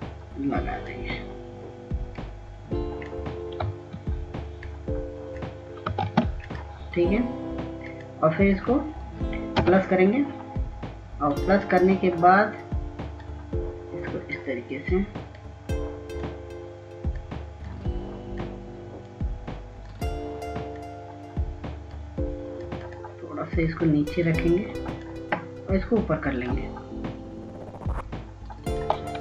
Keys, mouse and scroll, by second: 5.4 click, 6.8 ctrl+space, 7.2-29.2 drag.